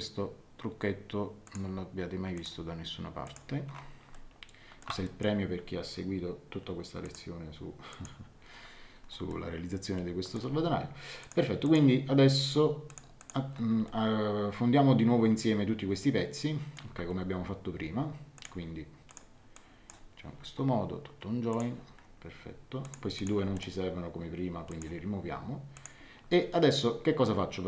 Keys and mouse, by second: 1.4 click, 4.1 shift+middle click, 7.0 click, 9.3 shift+middle click, 11.2 click, 12.8 click, 13.8 shift+middle click, 18.3 click, 21.5 click, 22.8 click, 23.1 shift+click, 23.5 right click, 24.7 click, 25.7 click, 26.3 shift+middle click.